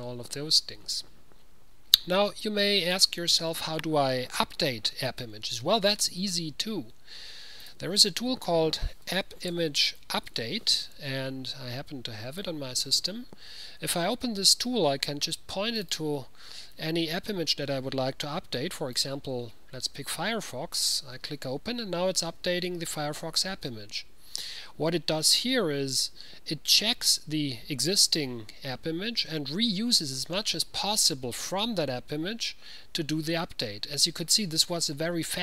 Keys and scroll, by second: 9.1-11.4 typing.